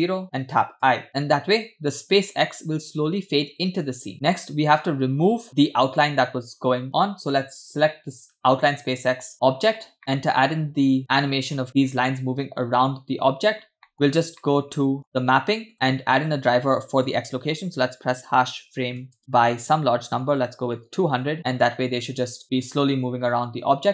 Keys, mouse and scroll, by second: 0.8 i, 1.1-4.1 drag, 4.1-5.5 scroll up 6, 5.5-5.9 scroll down 4, 8.1 click, 9.3 scroll down 2, 10.0 scroll down 1, 10.0 middle click, 13.3-14.4 scroll up 7, 13.9 middle click, 14.4 middle click, 15.7 middle click, 16.2-21.4 drag, 20.8 0, 21.7 space, 23.7 space.